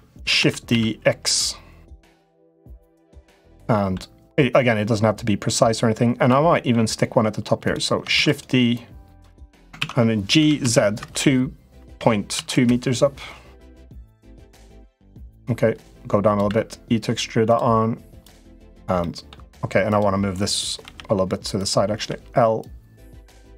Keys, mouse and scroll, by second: 0.1 shift+d, 2.8 middle click, 4.3-6.0 drag, 6.4 middle click, 7.4 click, 7.9 shift+d, 8.5 click, 9.5 ctrl+z, 10.1 g, 13.5 middle click, 15.4 click, 16.2 e, 18.7 middle click, 19.7 click, 20.6 l, 21.7 l, 22.5 click.